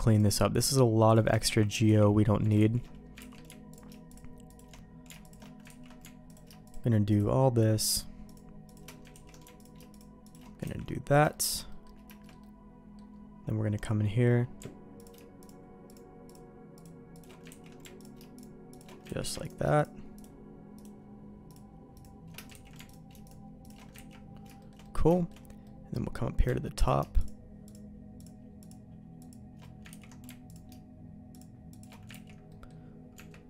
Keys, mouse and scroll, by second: 1.1 alt+shift+click, 1.9 ctrl+z, 2.6 ctrl+shift+z, 3.2 ctrl+x, 4.1 alt+shift+click, 5.8 ctrl+x, 7.8 click, 8.7 alt+shift+click, 9.1 ctrl+x, 9.6 click, 10.6 ctrl+x, 11.3 middle click, 11.7 middle click, 12.2 shift+middle click, 12.4 middle click, 15.0 alt+click, 16.3 alt+shift+click, 17.5 ctrl+x, 18.7 click, 19.1 ctrl+x, 19.4 click, 19.8 click, 20.7 click, 21.9 click, 22.5 ctrl+x, 22.9 click, 24.0 ctrl+x, 24.6 shift+middle click, 24.8 middle click, 25.1 shift+middle click, 25.6 middle click, 27.2-29.3 alt+shift+drag, 29.9 ctrl+x, 30.5 alt+click, 31.7 click, 32.3 ctrl+x, 32.5 middle click, 33.1 Tab.